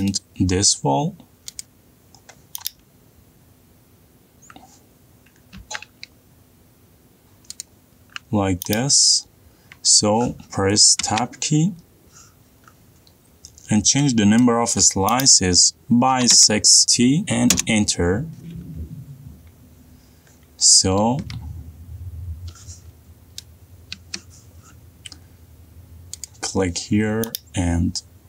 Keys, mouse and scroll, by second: 0.0 click, 0.3 middle click, 0.3 middle click, 1.1 middle click, 1.5 middle click, 2.7 click, 3.3 middle click, 3.4 middle click, 4.1 middle click, 4.3 middle click, 4.5 middle click, 5.1 middle click, 8.8 click, 8.8-10.2 scroll up 1, 12.1 Tab, 15.5 click, 16.9 typing, 18.6 Return, 20.9 middle click, 21.0 middle click, 21.4 middle click, 21.5 middle click, 21.8 middle click, 22.2 middle click, 24.5 middle click, 25.0 Escape, 25.8 click, 25.9 click, 26.9 middle click, 27.4 click.